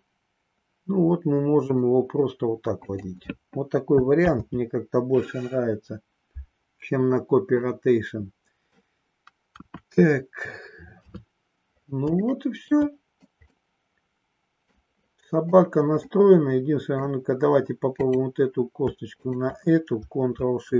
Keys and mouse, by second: 2.9 click, 4.2 ctrl+z, 7.7 middle click, 9.5 KP_1, 10.9 KP_3, 12.2 shift+middle click, 13.5-14.8 middle drag, 16.1 middle click.